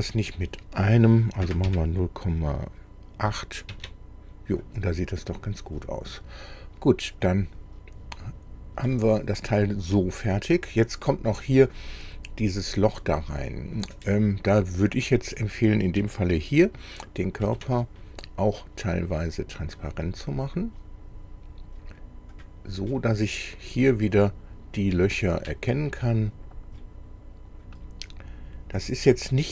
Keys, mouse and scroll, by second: 1.4 KP_0, 1.7 KP_Decimal, 3.3 KP_8, 3.7 Tab, 5.3 scroll down 2, 7.2 click, 8.9-11.3 middle drag, 15.2 click, 17.4 ctrl+d, 19.3-22.0 drag, 22.4 click, 22.9-23.9 middle drag, 24.6-25.0 scroll up 2, 25.0 shift+middle click, 26.3 scroll down 1, 26.8-27.8 middle drag.